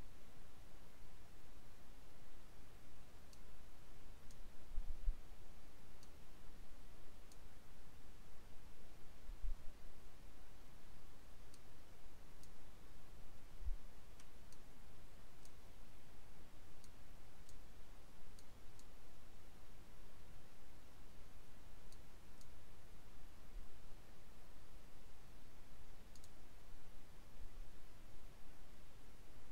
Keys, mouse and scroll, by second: 3.3-4.5 drag, 6.1-7.6 drag, 11.5-12.7 drag, 14.6-15.7 drag, 16.9 click, 18.4 click, 21.8 click, 26.1 click.